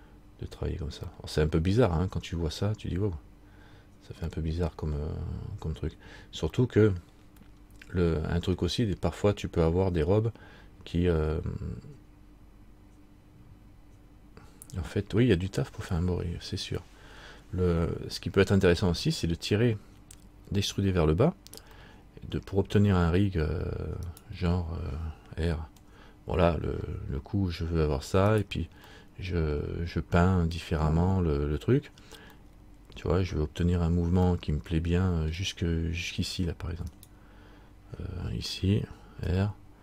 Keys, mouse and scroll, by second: 1.3 middle click, 4.5 middle click, 6.7 middle click, 7.2 middle click, 22.0 middle click, 24.3 right click, 25.9 r, 29.1 middle click, 34.5 middle click, 37.1 right click, 39.4 r.